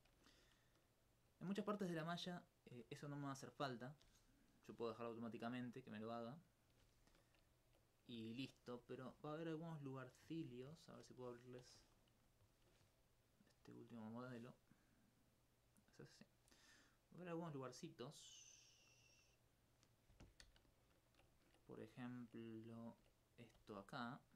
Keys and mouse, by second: 1.5 alt+click, 2.9 right click, 4.6 middle click, 5.4 click, 9.3 alt+click, 10.0 alt+click, 12.1 F1, 13.3-15.1 drag, 20.7 alt+click, 20.9 alt+s, 23.9 right click.